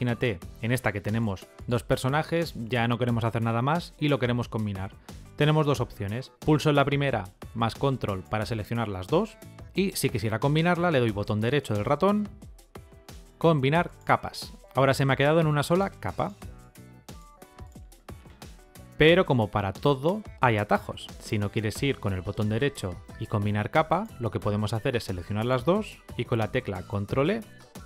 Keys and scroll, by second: 26.2 ctrl+e.